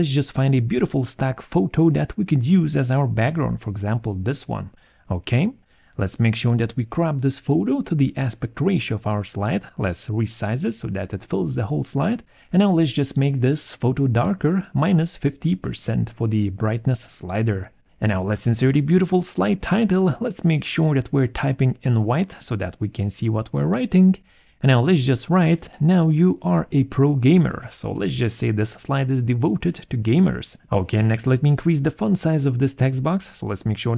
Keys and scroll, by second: 2.1 a, 2.4 m, 2.4 r, 6.7 alt+1, 10.4 alt+4, 14.2 -, 14.3 5, 14.4 0, 24.2-29.7 typing, 31.5 BackSpace, 31.7 Return, 32.0 ctrl+a, 32.7 ctrl+e.